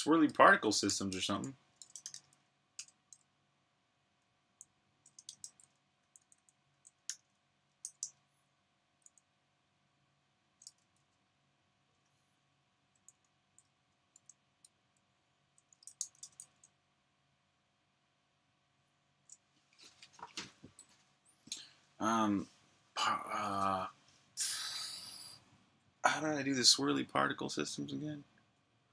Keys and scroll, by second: 0.6-2.5 typing, 3.7-7.3 typing, 8.6-9.3 typing, 13.0-13.8 typing, 15.5-16.3 typing.